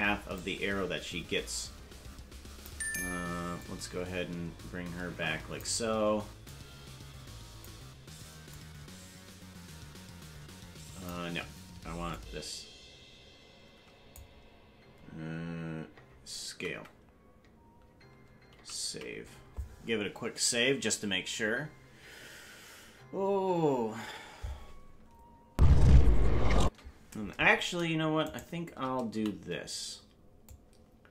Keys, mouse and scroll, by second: 0.4-2.7 drag, 3.6-5.6 drag, 6.4-7.7 drag, 8.5-11.1 drag, 12.1-14.2 drag, 16.5 alt+s, 20.7 alt+s, 25.5 space, 26.7 space, 28.3 shift+right click, 29.1 a, 30.5-31.1 drag.